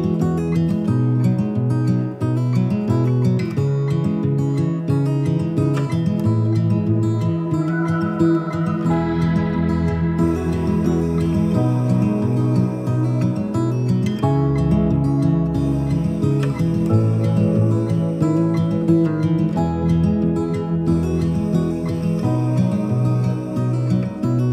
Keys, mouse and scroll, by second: 7.3-14.0 drag, 16.6 click, 21.6-24.5 drag.